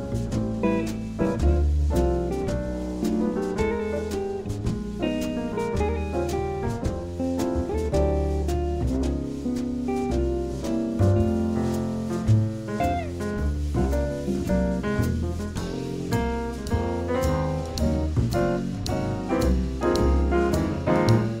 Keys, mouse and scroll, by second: 2.0-4.0 drag, 7.2-10.9 drag, 11.9-13.4 drag, 13.4 middle click, 14.2-15.8 drag, 15.8 middle click, 19.4-21.4 drag.